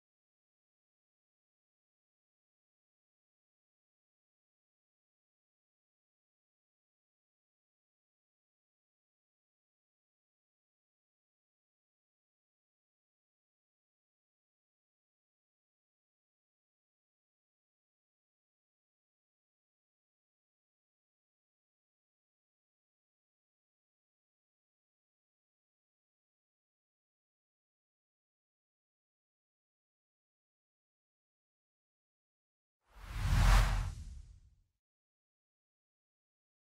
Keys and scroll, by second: 23.6 ctrl+;.